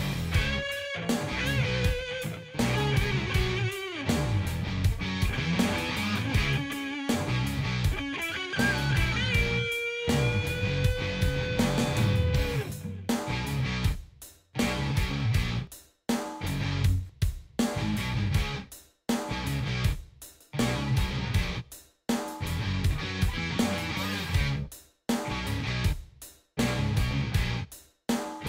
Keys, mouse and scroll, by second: 2.6-3.5 drag, 4.4 click, 6.3 click, 8.7 click, 12.6 click, 13.2 click, 19.1 ctrl+=, 20.2 ctrl+-, 21.1 ctrl+-, 23.4-24.6 drag, 26.6 click.